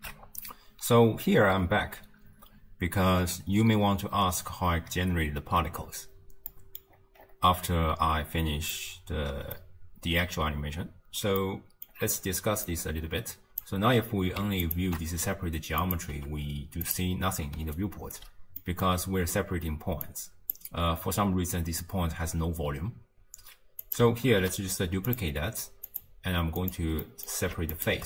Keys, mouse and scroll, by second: 0.7 ctrl+alt+shift+q, 6.5 middle click, 6.9-8.7 scroll up 8, 8.7-12.0 middle drag, 12.0-12.7 scroll up 3, 12.7 click, 14.7 ctrl+shift+click, 15.8 click, 16.1 g, 17.6 d, 17.8 right click, 18.2 d, 18.6 middle click, 18.8-19.3 scroll up 2, 20.0 click, 23.8 click, 24.3 ctrl+shift+d, 25.9-27.1 drag, 27.1-27.8 middle drag, 27.8 ctrl+shift+click.